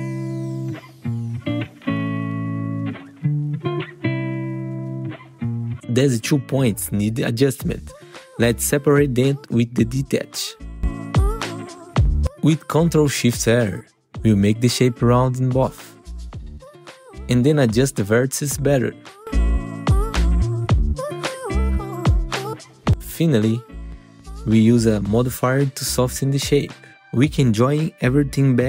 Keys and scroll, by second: 0.0 F4, 1.0 F4, 2.4 F4, 3.6 F4, 6.9 ctrl+t, 12.1 3, 13.0 ctrl+shift+r, 14.3 F4, 16.8 1, 20.9 1, 21.0 F4, 23.0 F4, 27.4 ctrl+t, 28.2 F4.